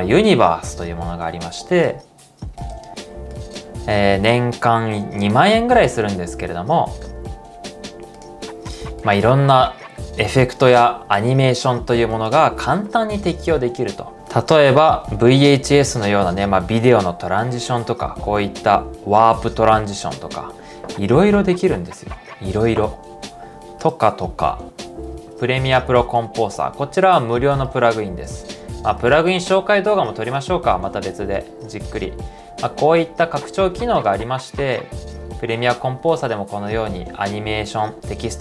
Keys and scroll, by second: 14.1 super+z, 14.1 typing, 27.8 typing.